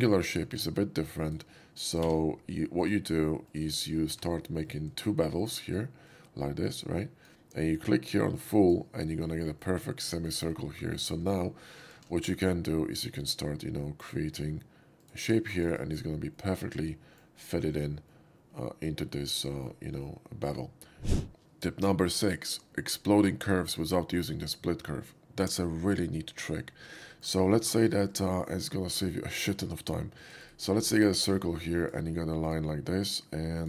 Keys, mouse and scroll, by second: 0.2 click, 1.1 click, 2.9 click, 3.5 click, 3.7 right click, 4.2 2, 4.7 click, 5.3 shift+click, 5.9-7.1 shift+drag, 8.7 click, 9.3 middle drag, 9.5 right click, 10.6 shift+middle drag, 10.9 shift+middle drag, 11.9 alt+z, 13.2 click, 13.9 click, 15.1 click, 15.6 click, 16.4 middle click, 18.1-19.7 middle drag, 20.6-21.1 middle drag, 27.1 shift+middle click, 28.1 shift+click, 29.4 shift+click, 30.2 click, 30.5 right click, 30.8 middle click, 31.1 shift+middle click, 31.9 shift+click, 32.5 shift+click, 33.4 shift+click.